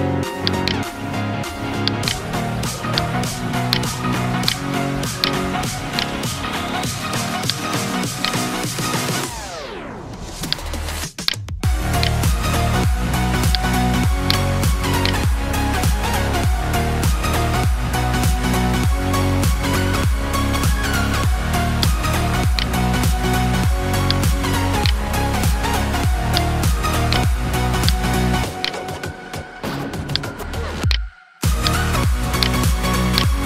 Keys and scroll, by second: 4.8 ctrl+space, 5.3 ctrl+space.